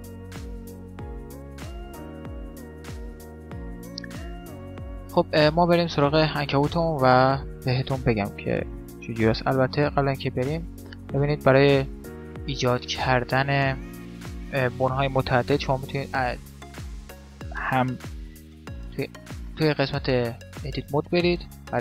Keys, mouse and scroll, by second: 0.6 Tab, 1.4 x, 2.6 shift+s, 4.0-5.6 middle drag, 9.5 shift+a, 11.1-12.9 middle drag, 14.5 middle click, 15.2-17.9 middle drag, 18.6 Tab, 21.4-21.8 right drag.